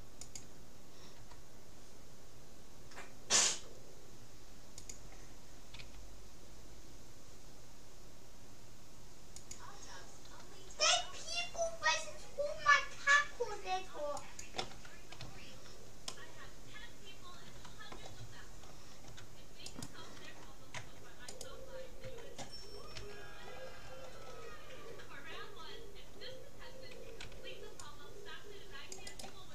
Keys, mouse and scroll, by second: 1.2 r, 5.8 s, 10.6 g, 15.2 a, 16.2-17.8 middle drag, 18.4-19.8 middle drag, 19.8-23.0 right drag, 20.8 Tab, 22.0 Tab, 23.0 a, 23.6-24.8 middle drag, 27.2 c.